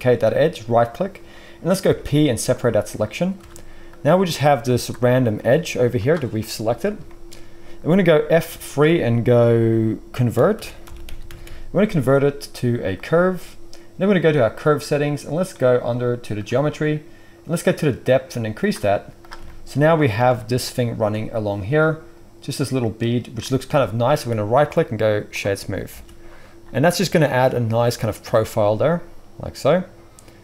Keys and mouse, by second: 0.9-3.9 middle drag, 1.8 p, 3.4 Tab, 3.9 click, 4.8-14.3 middle drag, 5.3 g, 8.4 F3, 14.3 click, 14.4-16.3 middle drag, 16.3-26.2 drag, 18.9 z, 24.5-28.2 middle drag, 24.5-26.2 right drag, 25.9 alt+a.